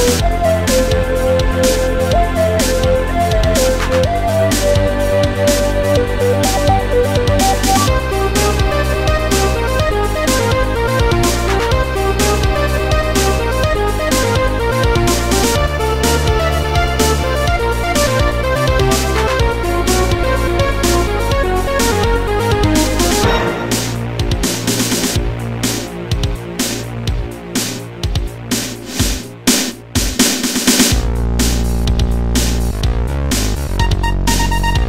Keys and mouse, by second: 1.4 click, 5.4 click, 6.2 click, 6.6 click, 7.4 click, 8.3 click, 9.9 click, 10.7 click, 12.0 click, 13.0 click, 13.4 click, 15.6 click, 16.5 click, 17.8 click, 19.3 click, 19.7 click, 20.5 click, 21.9 click, 26.7 click, 27.3 click, 30.0 click, 31.6 click, 33.4 click.